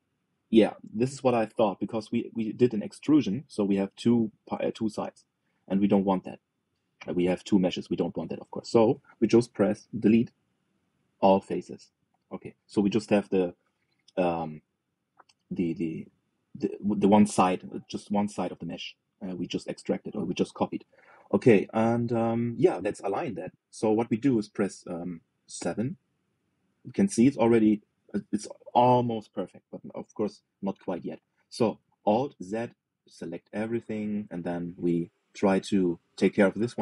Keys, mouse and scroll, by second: 0.3 g, 10.7 Delete, 16.7-26.3 middle drag, 26.3 KP_7, 33.1 alt+z, 33.6 click, 34.9 shift+middle click, 35.5-36.1 scroll up 3, 36.1 shift+middle click, 36.5-36.8 scroll up 3.